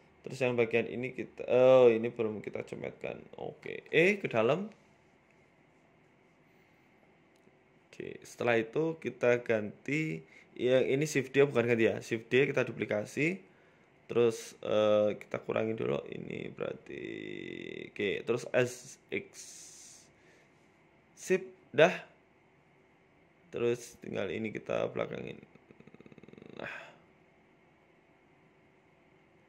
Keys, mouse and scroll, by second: 0.1 click, 0.8 right click, 1.0 middle click, 1.8 KP_Decimal, 2.8 Tab, 3.2 s, 4.8 Tab, 5.5 e, 7.9 KP_1, 8.3 scroll down 1, 8.8 shift+middle click, 8.8-9.5 scroll down 3, 9.1 Tab, 9.6 z, 10.7 right click, 11.2 shift+d, 12.2-12.6 scroll up 4, 12.4 shift+middle click, 13.5 g, 17.0 click, 18.2 click, 18.4 click, 18.6 click, 18.8 click, 19.7 s, 21.8 middle click, 22.7 scroll down 2, 23.4 z, 23.9 scroll down 2, 24.1 middle click, 24.4 scroll up 2, 24.6 shift+middle click, 25.0 g, 25.9 right click, 26.3 g, 28.8 z.